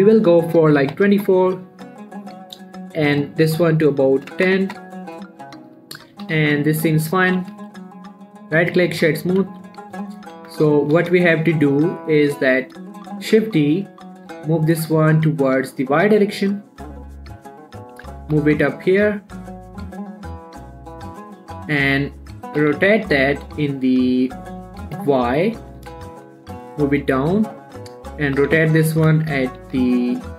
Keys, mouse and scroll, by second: 3.5 click, 6.0 scroll down 1, 6.3 shift+middle click, 6.5 g, 6.8 x, 7.4 click, 7.6 shift+middle click, 7.7 shift+scroll up 1, 7.8 z, 8.1 middle click, 8.4 scroll up 1, 8.7 right click, 9.0 click, 9.3 middle click, 10.4 7, 10.8 Tab, 11.1 shift+middle click, 13.6 shift+d, 14.7 y, 17.3 click, 18.4 g, 18.6 x, 20.5 click, 20.9 middle click, 21.8-22.2 scroll up 1, 22.2 middle click, 22.9 r, 23.2 x, 26.0 click, 26.2 g, 26.5 z, 27.7 click, 28.0 middle click, 28.7 r, 29.0 x, 30.0 z.